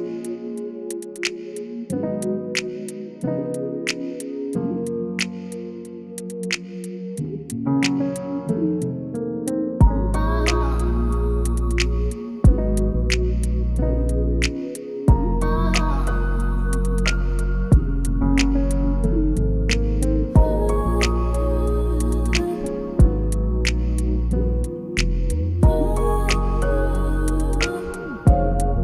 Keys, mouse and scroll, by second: 0.0-0.7 typing, 1.5 click, 3.1-4.6 typing, 5.9 click, 9.9 click, 14.6-28.7 drag, 28.7 ctrl+s.